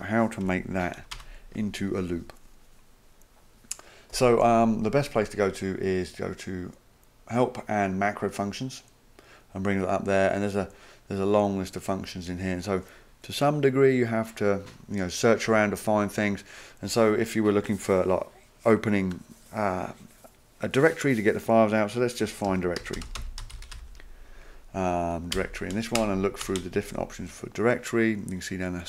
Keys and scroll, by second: 0.4 Home, 1.0 Return, 1.1 Return, 22.5 ctrl+f, 22.6-24.2 typing, 25.3 typing, 26.0 Return, 26.4 Return, 26.6 Return.